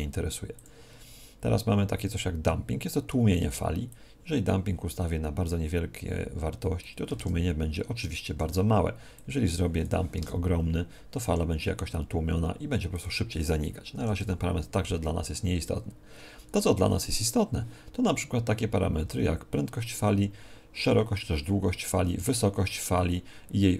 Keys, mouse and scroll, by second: 7.1 alt+a, 9.1-11.1 drag, 10.7 alt+a, 12.9-23.7 drag.